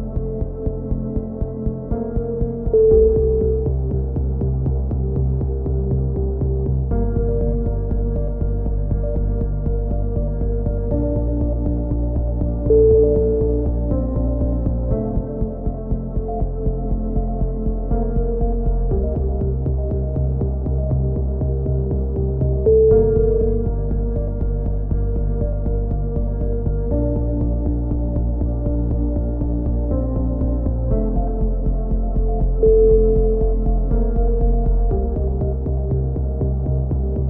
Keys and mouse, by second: 0.4 a, 0.7 z, 1.3 ctrl+r, 3.1-4.8 drag, 3.4 z, 4.2 z, 5.1 click, 6.7-8.9 typing, 7.0-8.3 middle drag, 9.6-11.2 middle drag, 13.8 a, 14.1 z, 15.3 click, 15.8-18.0 right drag, 16.4 x, 18.4 click, 18.9 right click, 21.4 a, 21.4 z, 21.4 z, 22.5 click, 22.7 a, 22.9 z, 23.1 a, 23.3-24.5 drag, 23.5 a, 26.1 KP_7, 26.6 middle click, 27.1 z, 28.4 z, 28.7-29.7 drag, 30.2 KP_3, 30.6-31.6 middle drag, 30.7 z, 31.2 z, 31.7 click, 31.9 click, 32.1 right click, 32.6-33.8 right drag, 33.4 alt+m, 34.2-35.4 right drag, 35.4-37.2 typing.